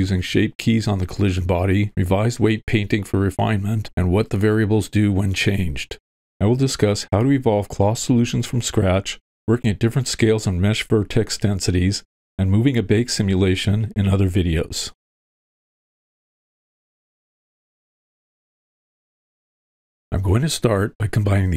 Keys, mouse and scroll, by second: 21.3 click.